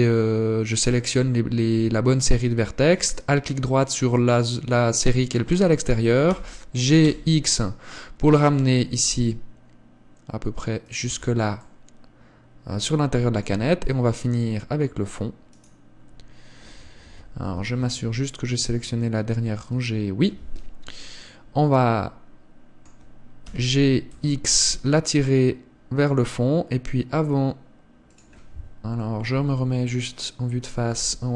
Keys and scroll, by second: 11.4 Tab, 13.8 Tab, 17.7 KP_1, 18.3 z, 20.0 z, 29.5 KP_1, 31.1 z.